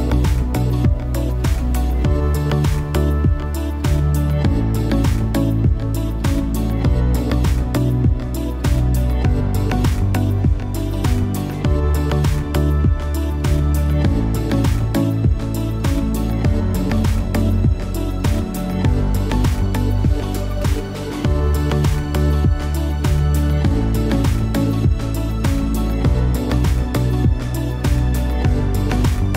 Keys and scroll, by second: 14.0 Return.